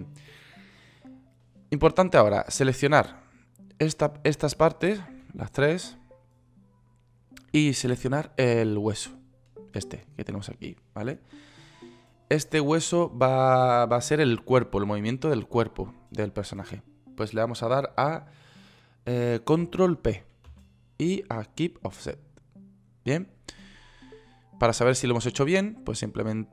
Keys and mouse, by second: 20.9 ctrl+p, 25.0 click.